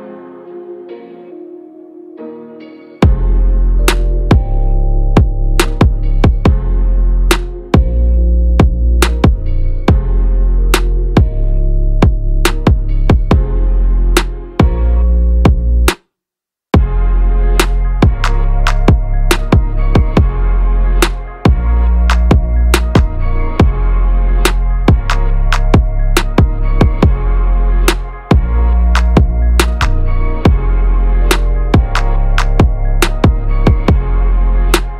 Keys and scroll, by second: 15.9 ctrl+-, 31.0 ctrl+a.